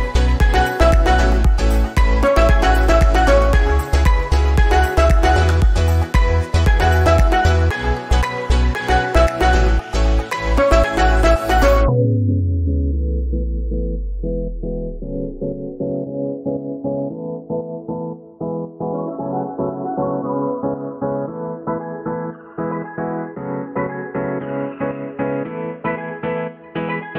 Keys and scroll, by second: 19.1 l.